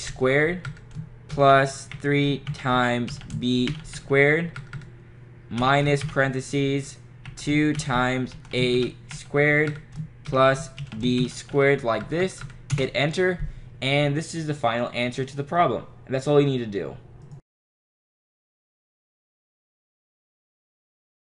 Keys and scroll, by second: 0.0-0.4 typing, 0.7 Right, 2.0-4.5 typing, 4.6 Right, 5.6 -, 6.1 (, 7.3 2, 8.6-9.7 typing, 11.3 ^, 11.6 2, 12.1 Right, 12.8 Return.